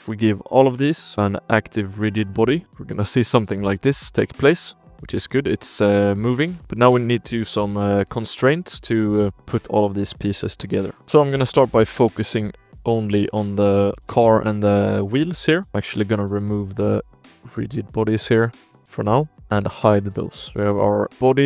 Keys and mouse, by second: 0.5 ctrl+z, 1.1-2.9 drag, 2.7 ctrl+s, 2.7 space, 4.0 space, 4.4 ctrl+s, 4.8 click, 5.7 space, 6.3 drag, 6.9 click, 7.8 shift+drag, 8.4 drag, 9.3 shift+drag, 10.2 click, 10.9 click, 11.1 shift+click, 11.5 shift+click, 12.6 drag, 13.0 ctrl+i, 13.4 click, 13.7 z, 13.9 click, 14.3 shift+click, 14.9 drag, 15.4 shift+click, 15.7-18.9 drag, 19.4 space, 19.5 h, 19.8 drag, 20.3 click, 20.5 g, 20.9 click, 21.1 g.